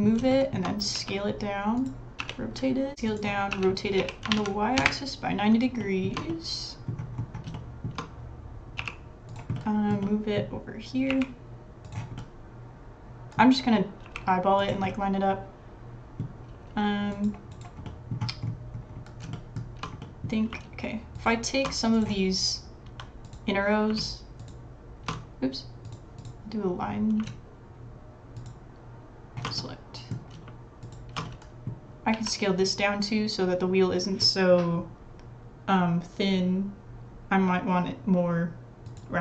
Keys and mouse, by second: 0.2 shift+middle click, 0.9 s, 1.8-2.9 drag, 2.2 r, 2.9 ctrl+z, 3.1 click, 3.5 r, 5.8 shift+middle click, 6.3 middle click, 7.5 shift+middle click, 8.8 g, 9.5 click, 10.0 click, 11.1 g, 12.1-13.5 middle drag, 14.0 g, 14.9-16.2 middle drag, 16.5 s, 17.8 click, 19.3 shift+middle click, 19.4 shift+click, 20.0 click, 21.2 alt+shift+click, 23.2 click, 23.3 click, 24.4 alt+shift+click, 29.6 middle click, 30.8 alt+shift+click, 31.2 middle click, 32.1 s, 32.3-36.8 drag.